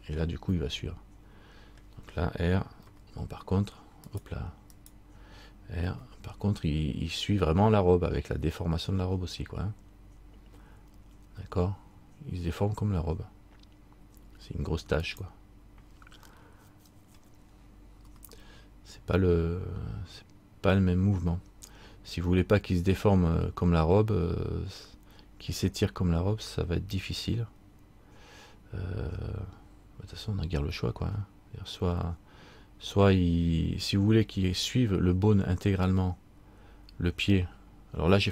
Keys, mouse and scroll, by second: 0.7 middle click, 3.0 r, 4.9 right click, 6.0 r, 16.5 middle click, 18.2 r.